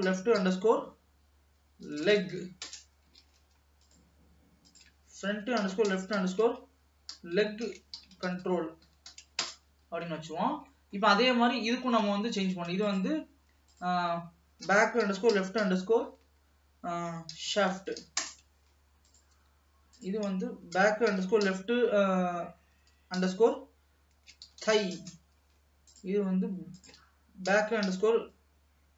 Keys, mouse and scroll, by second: 3.4 ctrl+s, 3.9 click, 4.8-7.8 drag, 10.0 ctrl+s, 10.6-10.9 scroll down 1, 10.9 middle click, 11.2-11.8 scroll up 3, 11.8-13.0 middle drag, 13.0 click, 13.9-16.9 drag, 19.2 click, 19.9-23.0 drag, 26.9-28.9 drag.